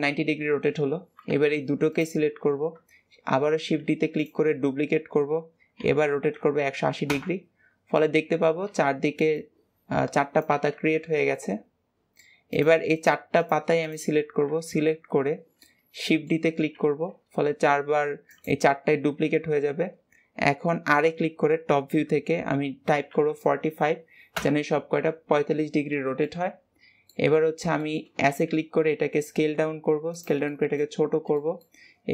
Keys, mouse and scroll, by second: 1.8 shift+click, 3.4 shift+d, 5.6 r, 7.8-10.8 middle drag, 10.8-11.2 scroll down 2, 11.2-12.4 middle drag, 12.4 click, 12.8 shift+click, 13.2 shift+drag, 13.6 shift+click, 14.4 KP_1, 15.4-16.6 middle drag, 16.6 shift+d, 19.2 KP_7, 20.9 r, 26.1-27.2 middle drag, 27.2-27.7 scroll up 1, 27.7-28.1 shift+middle drag, 28.1 s, 30.3-30.8 middle drag, 30.8-31.2 scroll up 3, 31.2-31.7 middle drag, 31.7-32.1 scroll up 1.